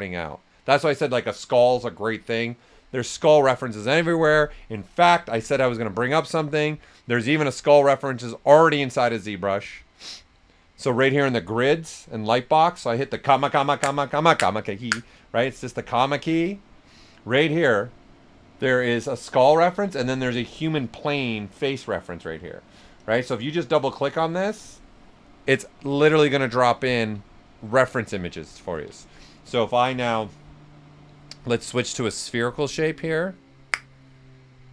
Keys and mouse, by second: 5.3 typing, 11.8 click, 11.8 typing, 15.7 ,, 18.1 click, 22.9 click, 25.3 right click, 31.8 click, 31.8 typing.